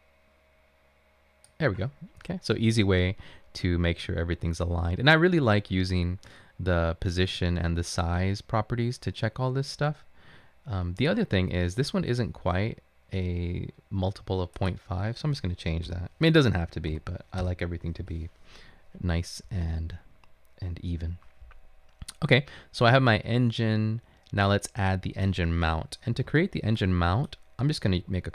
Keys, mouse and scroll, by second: 16.0 typing, 17.1-17.4 typing, 18.0 Return, 19.3 typing, 26.7 typing, 28.0-28.3 typing.